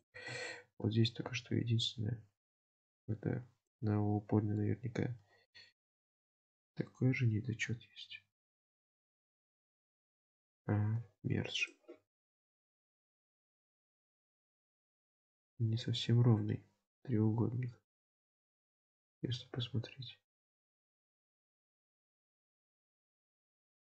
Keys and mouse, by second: 0.1 shift+middle click, 0.5 Tab, 1.4 1, 1.9 alt+z, 6.6 g, 10.5 ctrl+z, 12.8 g, 15.3 alt+z, 17.5 Tab, 18.3 Tab, 19.2 g, 21.9 Tab.